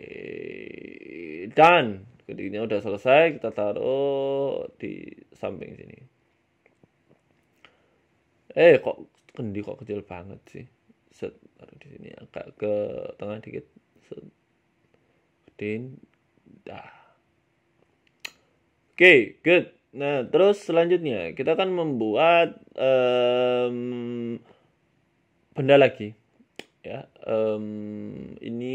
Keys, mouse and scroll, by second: 0.8 middle click, 1.0 Tab, 1.2 middle click, 1.5-2.0 scroll down 6, 1.7 shift+middle click, 2.2 click, 3.0 KP_1, 3.9 s, 4.7 shift+middle click, 5.2 g, 6.0 scroll down 1, 6.1 scroll up 2, 6.3 scroll down 2, 6.6 scroll down 1, 6.6 scroll up 1, 6.8 shift+middle click, 7.1 scroll up 1, 7.4 shift+middle click, 7.7 s, 8.5 g, 9.1 s, 9.7 middle click, 10.5 shift+middle click, 10.9 g, 12.1 KP_1, 12.6-13.2 scroll up 3, 13.2 g, 14.6 g, 15.4 s, 16.1 g, 17.0 middle click, 17.2-17.6 scroll down 7, 17.5 scroll up 1, 17.6-18.3 scroll down 2, 17.9 middle click, 18.3 middle click, 21.3 scroll up 1, 21.3 scroll down 3, 21.7 scroll up 3, 21.7 scroll down 1, 22.4 middle click, 22.7 scroll down 2, 22.9 middle click, 23.7 KP_1, 24.1 scroll down 2, 24.3 shift+middle click, 24.5 shift+a, 26.2 shift+middle click, 26.7 Tab, 27.0 click, 28.0 click, 28.2 click, 28.6 s.